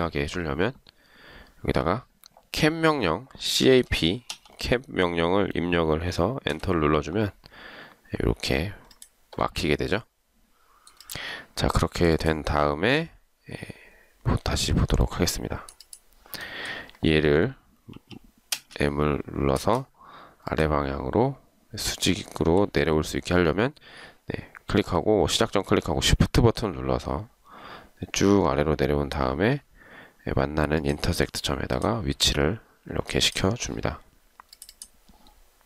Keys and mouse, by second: 3.6-4.5 typing, 6.5 Return, 18.1 m, 19.7 space, 30.9 shift+click.